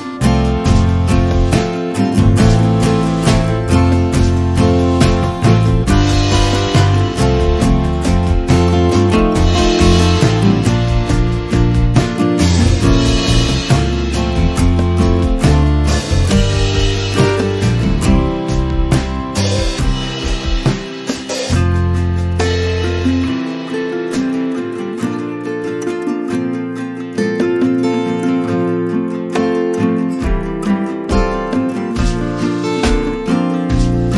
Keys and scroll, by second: 1.4 m, 4.5 space, 19.8 m.